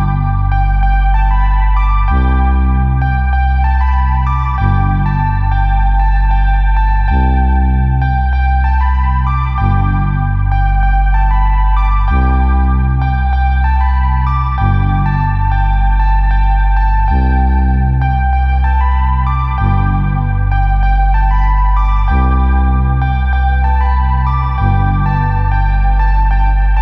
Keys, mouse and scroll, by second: 6.2 click, 8.2 click, 11.5 click, 12.7 click, 14.9 click, 15.8 click, 17.7 click, 18.7 click, 23.3 click, 24.2 alt+click, 25.4 click, 25.7 click, 26.6 click, 26.7 click.